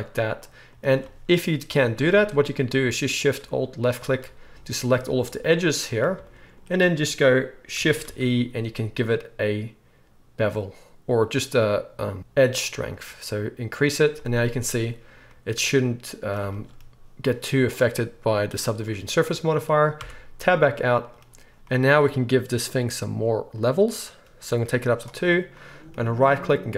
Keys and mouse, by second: 2.1 alt+a, 3.9 alt+shift+click, 8.0 shift+e, 10.4-23.5 middle drag, 20.0 Tab, 23.5-26.7 drag, 26.2-26.7 middle drag, 26.2-26.7 right drag.